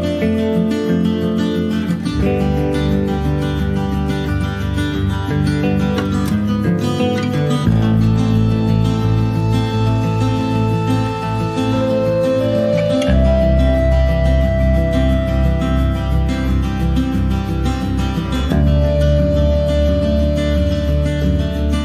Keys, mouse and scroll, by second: 0.3 click, 1.0-2.6 middle drag, 3.7 click, 4.4 scroll down 1, 4.5-5.8 middle drag, 5.8 2, 6.0 click, 6.9 ctrl+b, 10.2 Tab, 10.8 ctrl+a, 14.2-15.3 middle drag, 15.3 scroll up 1, 15.6 click, 16.0 shift+middle click, 16.5 click, 17.0 ctrl+z, 17.3 alt+middle click, 17.6 alt+middle click, 18.2 click, 19.6 alt+z.